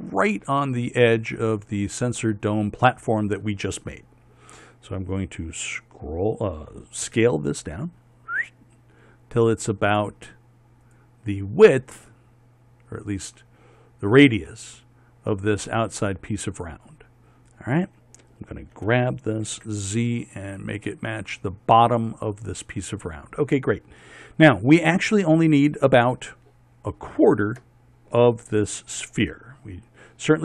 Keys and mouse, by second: 7.7 s, 19.5 g.